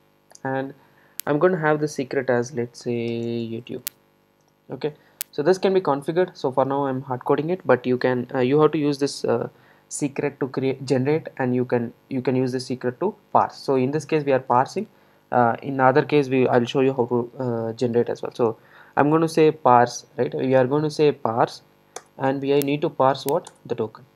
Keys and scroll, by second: 22.1 Return.